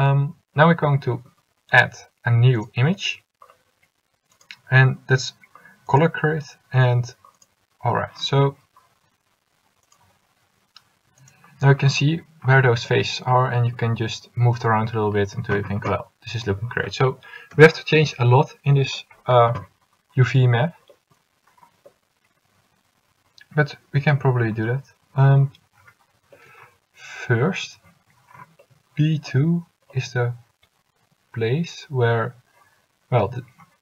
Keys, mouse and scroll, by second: 21.2-22.2 middle drag, 24.1 middle click.